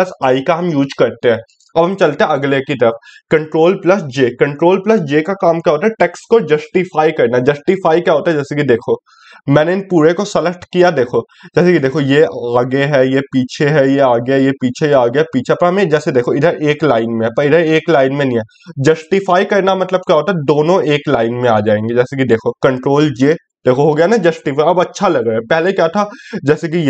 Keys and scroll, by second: 3.6 ctrl+j.